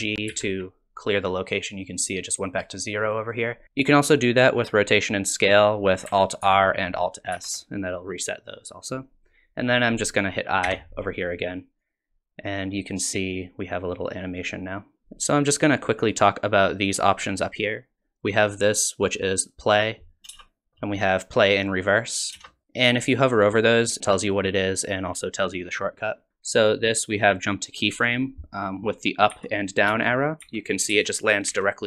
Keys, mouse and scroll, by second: 0.3 alt+g, 6.4 alt+r, 7.3 alt+s, 10.7 i, 11.8 click, 19.4 click, 20.3 space, 20.3 v, 21.6 click, 22.3 space, 22.6 space, 29.3 Up, 29.9 Down, 30.4 Up, 30.9 Down, 31.5 Up.